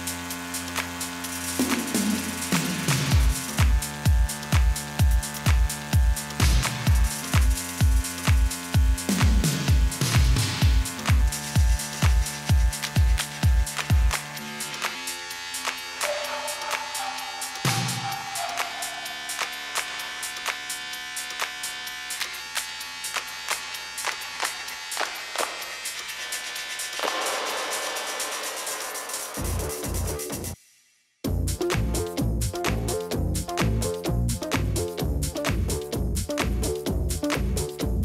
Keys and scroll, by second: 1.4 Down, 3.2 ctrl+c, 3.9 ctrl+v, 8.1-8.9 typing, 11.0 ctrl+v, 16.6-17.4 typing, 18.6-21.4 typing, 22.9 8, 23.5 8, 27.6 1, 28.1 0, 30.7 4, 33.1 a, 33.5 BackSpace, 33.6 0.